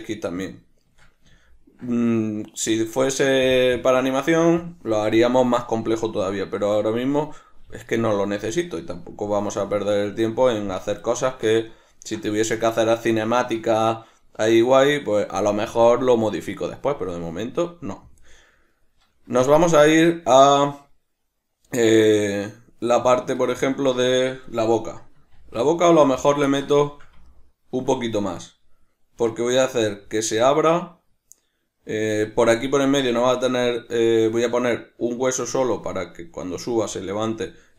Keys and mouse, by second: 0.5-18.7 shift+middle drag, 18.7 right click, 19.5-26.3 shift+middle drag, 25.4 shift+d, 26.3 click, 26.5-37.7 ctrl+middle drag.